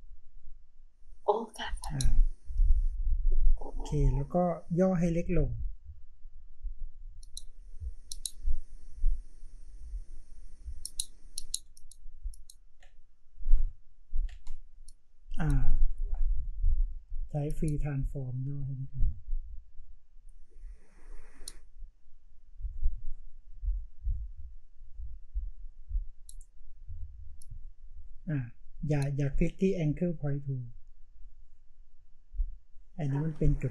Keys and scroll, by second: 11.6 space.